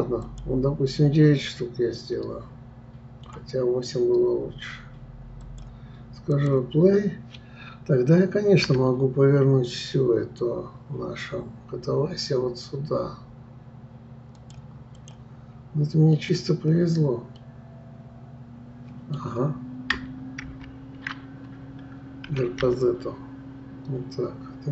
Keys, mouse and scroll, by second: 0.2-1.4 drag, 1.4-4.4 middle drag, 5.4 click, 6.3 click, 8.6 r, 17.4-20.4 middle drag, 20.4 ctrl+z, 22.3 r.